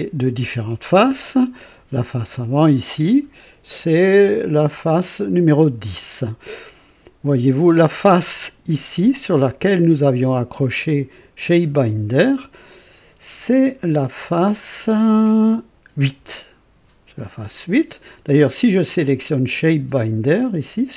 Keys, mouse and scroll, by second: 2.2 click, 9.0 click, 19.6 click.